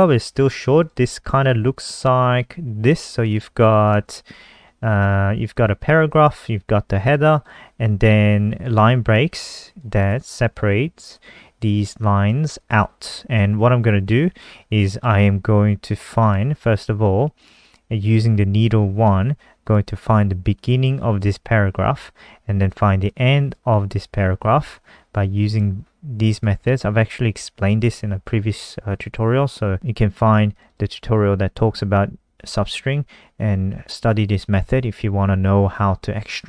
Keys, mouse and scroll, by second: 7.7 click, 14.7 alt+click, 16.5 click, 16.8-17.4 scroll down 2, 17.7 click, 25.9 click, 28.2-29.5 scroll down 1, 31.2 click, 31.5 click, 31.6 click, 32.4 click, 32.5 click.